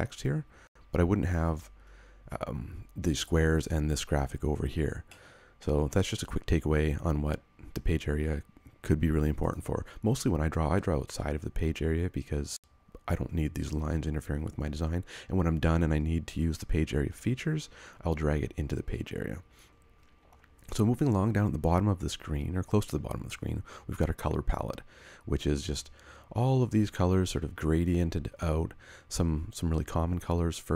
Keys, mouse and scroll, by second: 5.1 middle click, 5.8 scroll down 1.